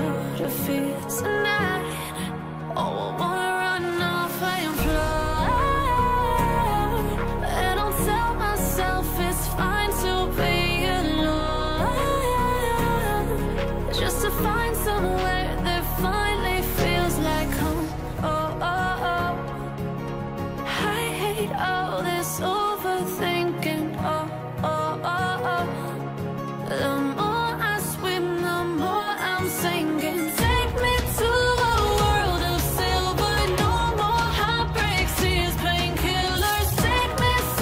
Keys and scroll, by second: 28.1 ctrl+Return.